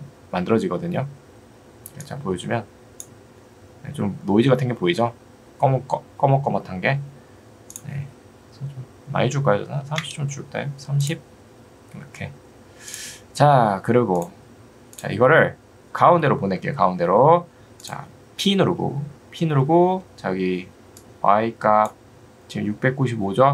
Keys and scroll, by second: 9.7 3, 10.1 Return, 18.7 p.